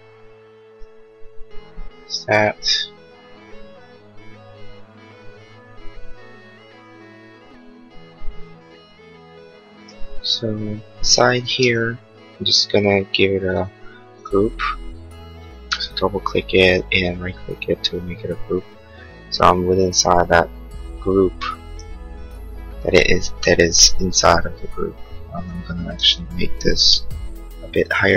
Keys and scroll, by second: 11.5 space, 15.1 Escape, 18.1 Escape, 25.9 Escape, 27.1 m.